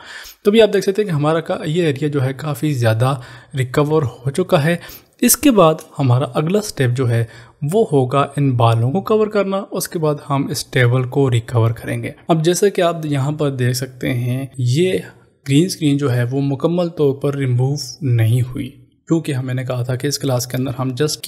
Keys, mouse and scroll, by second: 0.2 click, 4.1 space.